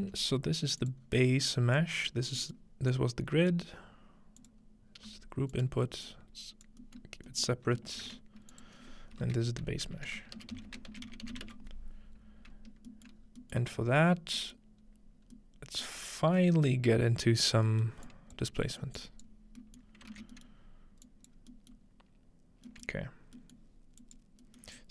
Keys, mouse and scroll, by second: 0.0 g, 0.8 click, 1.0-1.8 scroll down 1, 1.8-8.4 drag, 2.3 scroll down 2, 3.8 scroll up 2, 5.0-5.6 scroll up 1, 5.1 g, 7.5 middle click, 8.0 ctrl+j, 8.6-10.4 drag, 9.2 F2, 9.9-11.4 typing, 12.7-13.4 scroll down 5, 13.7 scroll up 2, 14.2 scroll down 1, 14.9-15.2 scroll up 2, 16.2-16.5 scroll up 1, 17.4-19.6 scroll down 3, 18.1-19.1 drag, 20.1 typing, 20.6 scroll up 2, 21.1 click, 21.3 scroll up 1, 21.4 scroll down 1, 24.0 click, 24.8 click.